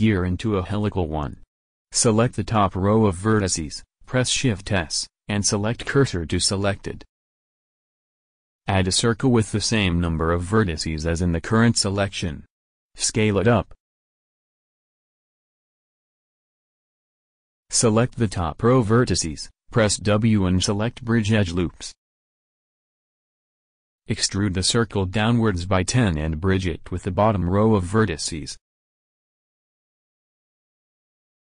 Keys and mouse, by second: 0.2 Tab, 3.0 Tab, 5.0 a, 6.4 shift+s, 10.5 shift+a, 12.9-14.9 drag, 16.4 s, 19.5 click, 21.2 middle click, 21.6 w, 26.3 a, 27.2 middle click, 27.7 e, 28.0 click.